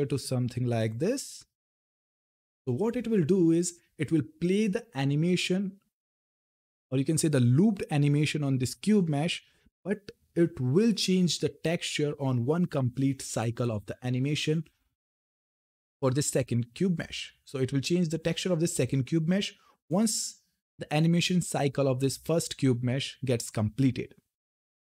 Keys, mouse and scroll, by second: 6.3 click, 17.1 click, 19.6 click.